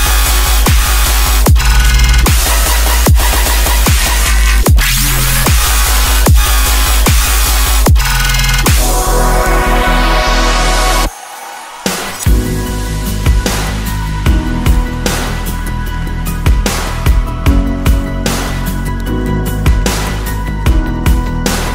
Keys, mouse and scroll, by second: 1.6-3.3 scroll down 4, 7.7-9.0 typing, 12.0-13.4 typing, 14.0 Return, 15.1 middle click, 20.1 middle click, 21.2-21.7 scroll up 6.